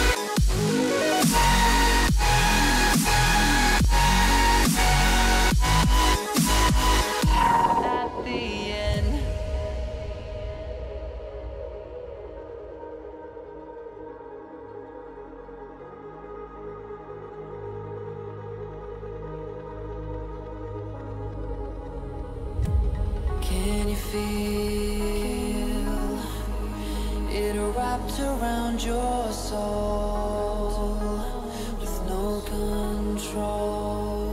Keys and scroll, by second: 10.5 Return, 16.0 x, 16.8 h, 18.7 b, 21.5 Return, 21.8 [, 22.5 Return, 22.9 [, 25.7 [, 27.9 ], 29.8 [, 31.8 [, 33.8 ].